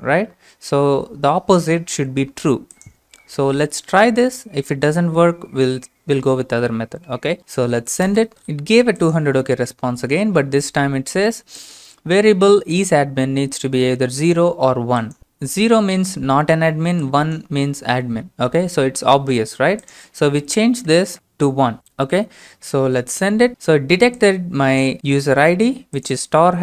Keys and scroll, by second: 20.9 BackSpace, 21.1 BackSpace, 22.8 BackSpace, 23.5 ctrl+space.